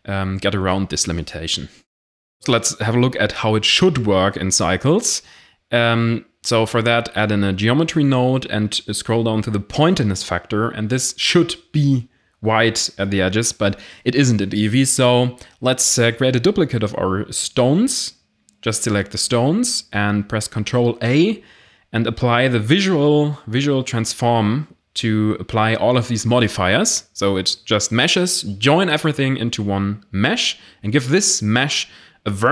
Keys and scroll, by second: 3.4 i, 3.5 n, 3.5 f, 3.6 o, 5.2-5.9 typing, 6.2 Return, 9.7 x, 12.6 a, 13.9 b, 14.8 shift+d, 14.9 x, 17.6 b, 19.2 ctrl+a, 24.9 ctrl+z, 26.4 ctrl+j.